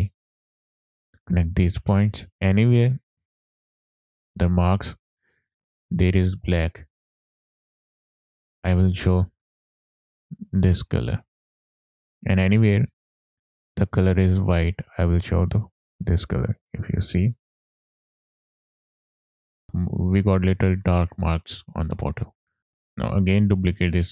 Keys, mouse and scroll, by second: 0.7-1.2 drag, 2.3 click, 2.3 scroll up 3, 2.8 middle click, 8.5 click, 11.9 click, 15.1-16.5 drag, 17.1-17.6 drag, 18.6 middle click, 18.9 ctrl+shift+click, 21.6-22.7 scroll down 6, 22.6 scroll up 1, 22.7 middle click, 23.4 click, 23.8 shift+d.